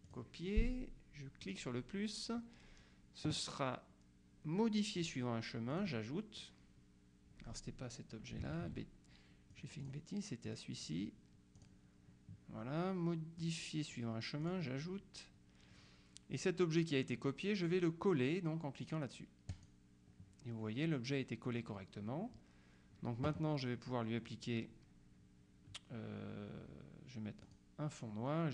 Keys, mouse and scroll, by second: 0.1 click, 1.5 click, 4.1-4.6 scroll down 1, 5.1 click, 5.8 click, 8.6 ctrl+z, 9.6 click, 10.5 click, 11.7 click, 13.5 click, 14.5 click, 19.6 click, 27.5 click.